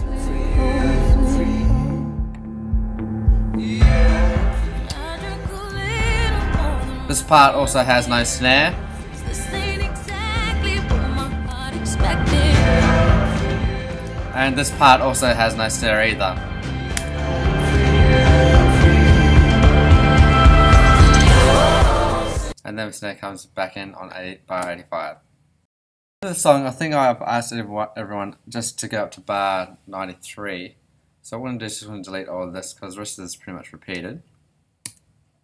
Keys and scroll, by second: 9.0 BackSpace, 16.9 BackSpace, 22.4 space, 34.8 BackSpace.